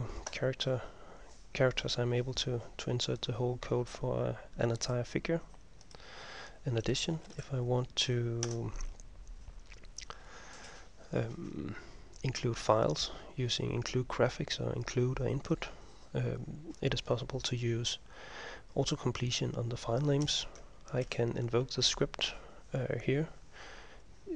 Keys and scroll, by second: 7.1-8.6 typing, 21.2 ctrl+m.